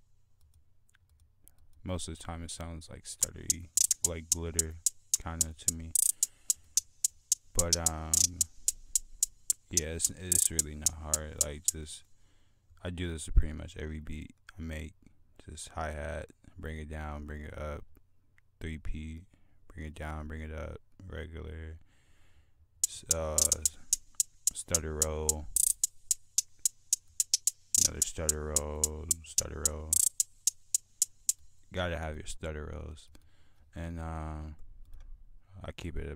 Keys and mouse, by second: 3.3 click, 4.5 right click, 32.7-33.3 drag, 33.4 F1, 33.4 click, 33.7 click.